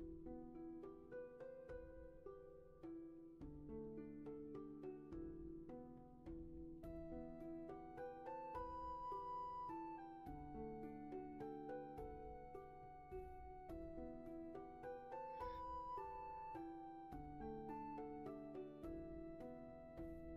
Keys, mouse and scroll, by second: 12.8 shift+space, 13.8 space.